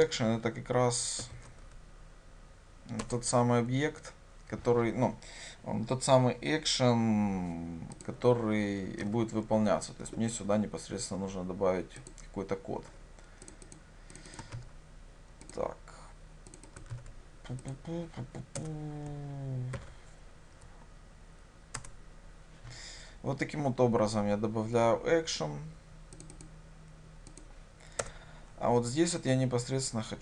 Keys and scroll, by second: 3.2 Return, 9.1 alt+Return, 14.6 ctrl+c, 17.0 ctrl+v, 22.0 ctrl+o.